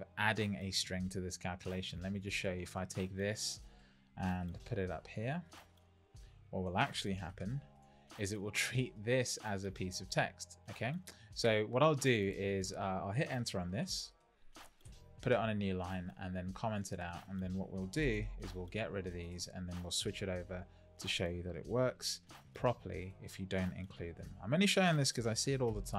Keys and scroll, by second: 4.4 super+c, 7.3 super+v, 13.7 super+c, 14.8 Return, 15.2 super+v, 21.9 shift+9.